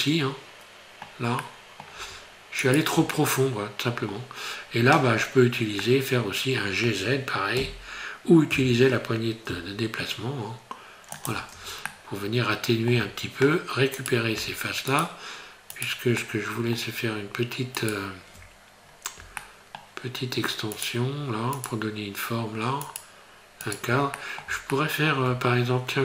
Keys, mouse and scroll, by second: 1.4 middle click, 2.6 shift+right click, 3.2 middle click, 5.0-5.6 scroll up 4, 5.8 middle click, 7.6 g, 11.5 Tab, 11.9 middle click, 13.0 Tab, 14.0 right click, 14.9 shift+right click, 15.8 right click, 16.2 shift+middle click, 17.8 shift+right click, 18.2-19.0 shift+scroll down 5, 19.4 shift+middle click, 20.8 shift+right click, 21.6 shift+right click, 22.9 shift+right click, 23.7 shift+right click, 24.2 middle click, 24.7 shift+middle click.